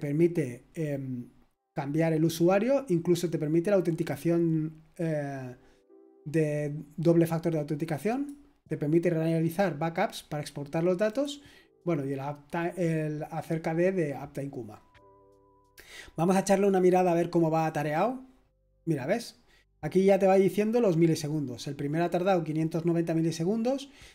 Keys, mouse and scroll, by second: 2.9-8.1 scroll down 2, 8.1-14.7 drag, 14.7-17.6 scroll up 2, 17.6 click, 18.7-24.1 scroll down 2.